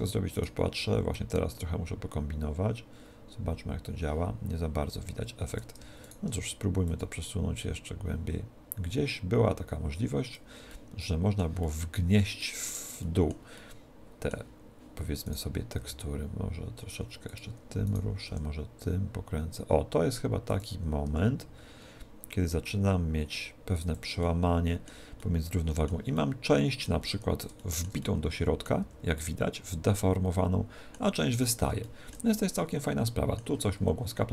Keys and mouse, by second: 0.4 right click, 1.2 click, 6.2 right click, 7.0 click, 10.7-15.4 middle drag, 15.4 right click, 15.9 r, 17.4 click, 17.4 r, 18.0 right click, 18.4 r, 20.6 click, 21.2 g, 24.0 click, 25.8-31.0 middle drag, 28.8 z, 31.2 z, 31.4 middle click, 32.4 middle click, 32.8 middle click, 33.0 middle click, 33.4-34.3 middle drag.